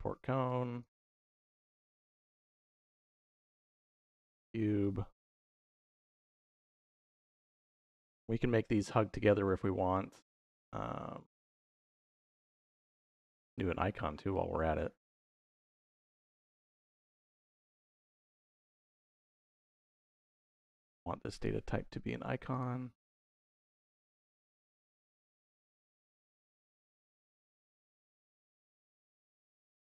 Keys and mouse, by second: 0.3 click, 1.1 shift+d, 1.3 y, 1.9 click, 2.3-3.8 drag, 4.6-5.4 drag, 6.5 click, 7.4 middle click, 9.9 middle click, 10.7-12.8 middle drag, 13.3 middle click, 14.2-15.3 drag, 15.8-17.6 drag, 18.1 middle click, 18.5 middle click, 19.5 middle click, 19.9 middle click, 20.6 middle click, 21.2-22.6 drag, 24.2 middle click, 24.7 middle click, 25.7-29.8 drag.